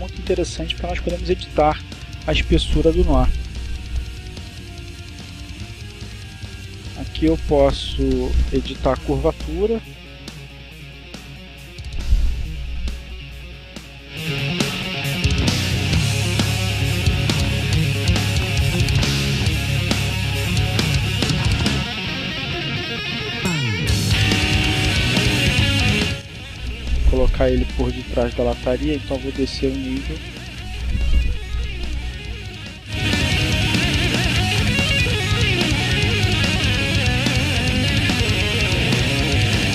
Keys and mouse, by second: 4.3-5.4 drag, 5.9-8.7 drag, 9.2-11.5 drag, 12.7 click, 13.9 click, 15.0 click, 16.5 Down, 17.3 Left, 19.8 click, 20.8 click, 22.2 Down, 23.0 Down, 25.0 click, 26.0 click, 29.1 click, 31.8 click, 32.8 click, 33.9 Down, 35.0 Right, 36.9 Left, 38.8 click.